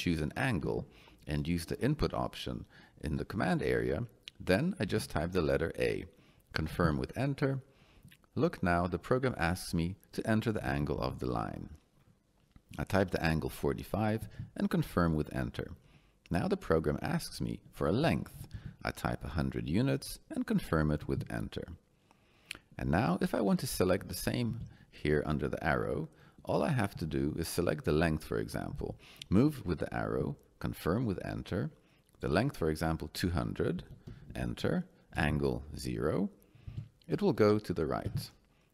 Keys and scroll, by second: 4.8 a, 6.7 Return, 10.7 4, 10.9 5, 14.2 Return, 17.9 2, 18.3 0, 21.0 Return, 24.5 Down, 26.9 Down, 28.7 Down, 30.0 Return, 33.8 2, 34.1 0, 35.1 Return, 36.7 0, 38.0 Return.